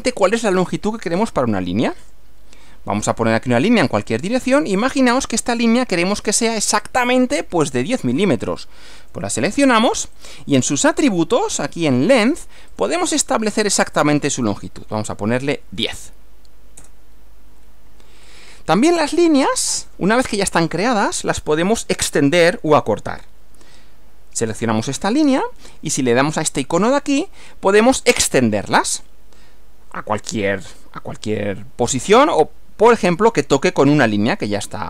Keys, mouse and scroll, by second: 2.1 click, 4.8 click, 6.9-7.8 drag, 9.0 click, 10.2 click, 12.8 click, 13.7 click, 15.8 1, 16.8 Return, 18.3 click, 24.6 click, 26.8 click.